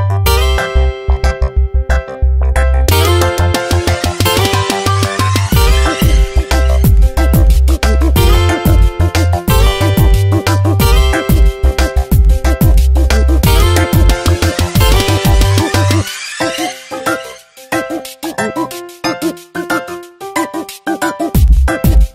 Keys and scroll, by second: 5.1 space, 7.0 space, 9.1 space, 14.1 space, 19.4 space.